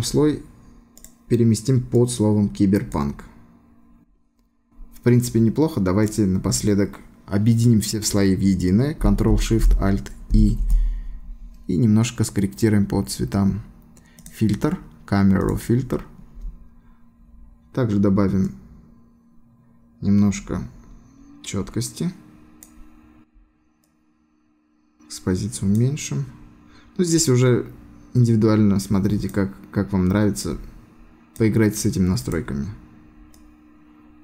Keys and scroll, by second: 10.3 ctrl+alt+shift+e.